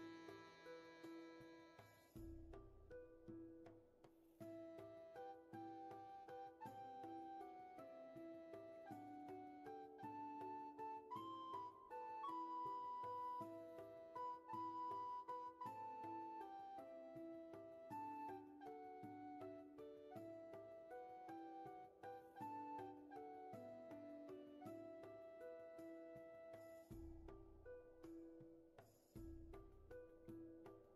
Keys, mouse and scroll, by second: 1.0 scroll up 1, 6.4 scroll down 1, 6.9 space, 7.5-8.2 scroll down 1, 8.2 scroll up 1, 8.8 scroll down 1, 11.1-11.9 scroll up 1, 15.2 ctrl+z, 19.3-19.8 scroll down 1, 19.8 space, 20.9-22.6 scroll up 1, 22.6 ctrl+z, 24.5 scroll down 1, 24.9 space, 25.5 scroll down 1, 26.2 space, 27.1-27.9 scroll down 1, 27.9-28.5 scroll up 1, 28.5 space, 29.2-30.9 scroll up 1.